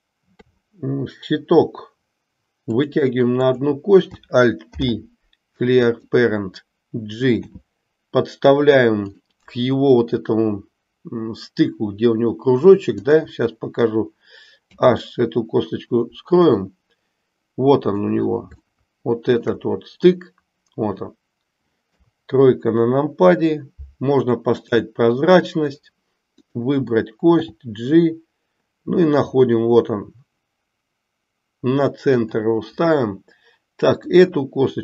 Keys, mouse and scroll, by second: 0.3 e, 3.4 click, 4.7 alt+p, 7.4 g, 13.0 click, 14.7 h, 16.4-18.0 middle drag, 18.8-19.8 shift+middle drag, 24.8 click, 27.3 g, 33.9 click.